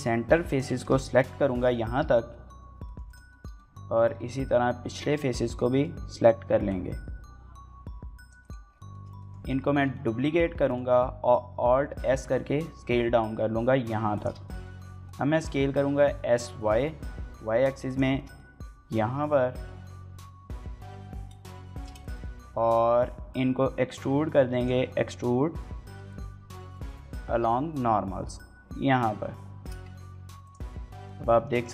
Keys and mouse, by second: 0.2 ctrl+click, 0.5 shift+middle click, 0.7 middle click, 2.8 right click, 3.1 shift+middle click, 3.4 middle click, 5.1 middle click, 8.2 right click, 8.7 shift+middle click, 9.0 middle click, 9.5 shift+middle click, 9.7 middle click, 10.0 shift+d, 10.5 click, 11.2 alt+s, 13.9 shift+click, 14.2 shift+middle click, 14.4 middle click, 14.8 middle click, 16.6 y, 17.6 click, 18.0 shift+middle click, 18.2-20.5 middle drag, 20.5 s, 20.8 y, 21.6 shift+click, 21.8 shift+middle click, 22.0 middle click, 22.8 middle click, 24.4 click, 26.0-29.4 drag, 29.6 Tab, 30.2 click, 30.8-31.7 middle drag.